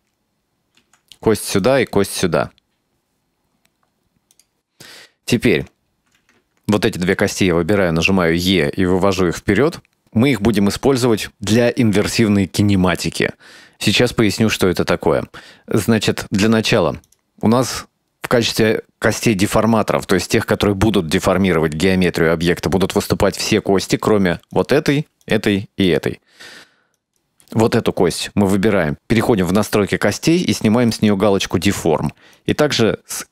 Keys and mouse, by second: 0.9 e, 1.9 e, 5.0 shift+middle click, 6.8 shift+right click, 8.3 e, 17.1 right click, 24.6 right click, 25.3 right click, 25.9 right click, 27.1 right click, 30.9 click, 32.4 right click.